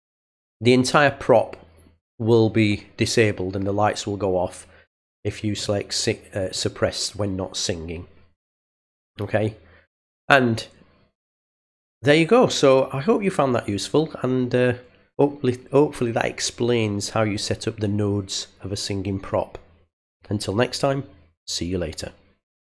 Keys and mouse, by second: 5.5 click, 6.4 click.